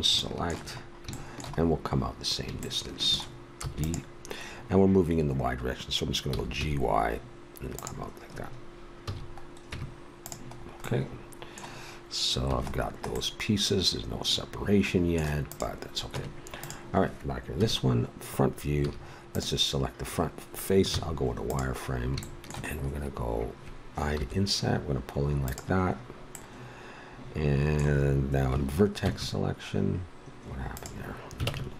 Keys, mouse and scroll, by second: 3.6 e, 6.3 g, 9.0 a, 9.7 Tab, 12.4 a, 16.1 Tab, 17.5 KP_1, 18.8 a, 19.3 right click, 20.9 z, 24.2 i, 29.0 Tab, 31.4 ctrl+Tab.